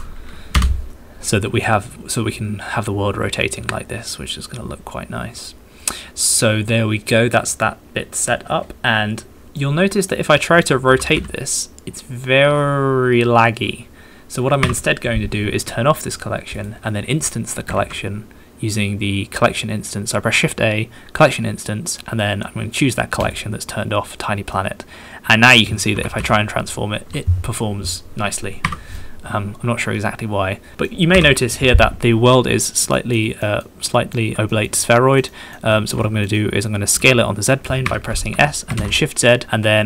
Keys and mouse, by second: 0.1 KP_9, 0.6 KP_0, 0.9 Return, 7.7 middle click, 8.2-9.6 middle drag, 9.7 middle click, 10.5 middle click, 11.4 r, 11.9 z, 15.2 Escape, 16.6 middle click, 17.7 shift+a, 24.7-29.1 middle drag, 25.9 r, 26.2 z, 28.6 Escape, 31.1 KP_1, 33.0 shift+middle click, 33.5 shift+middle click, 34.0 shift+middle click, 34.6 shift+middle click, 34.8 middle click, 35.4 middle click, 35.8 shift+middle click, 36.5 middle click, 36.9 s, 37.8 Escape, 38.3 s, 38.7 shift+z.